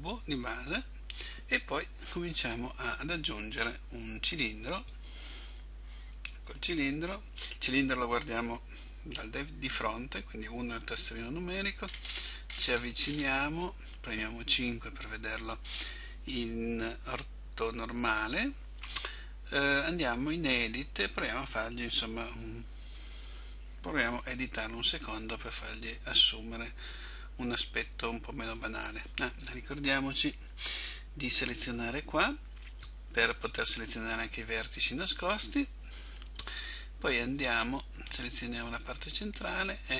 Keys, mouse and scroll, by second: 0.0 Delete, 2.4 shift+a, 10.5 KP_1, 11.9-12.7 scroll up 6, 14.5-15.3 scroll up 4, 14.5 KP_5, 22.9 Tab, 24.2 a, 25.1 b, 31.6 click, 35.6 b.